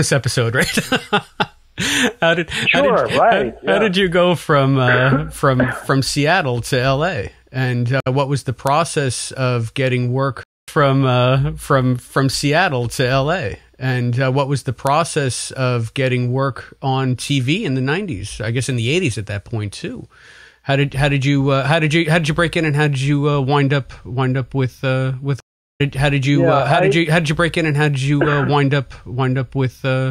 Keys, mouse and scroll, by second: 0.7 click, 1.2-3.0 drag, 3.4 click, 4.9 click, 5.4 click, 6.4-7.7 drag, 7.9 Delete, 9.4 click, 10.3 space, 10.5 click, 11.6 ctrl+s, 12.3 space, 24.0-25.2 drag, 25.3 space, 25.7 click, 25.7 space, 28.1-29.7 drag.